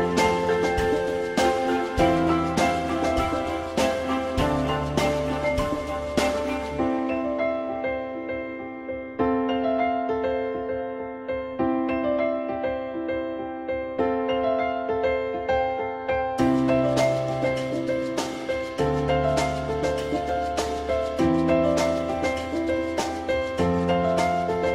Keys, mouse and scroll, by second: 3.7 alt+x, 18.1 F3, 19.6 F3, 21.8 F3, 23.3 F3.